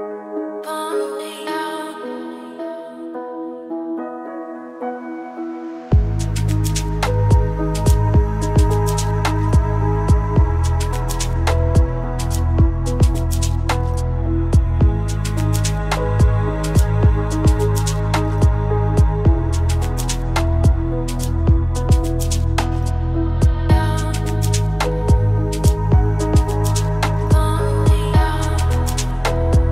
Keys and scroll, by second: 4.9 r.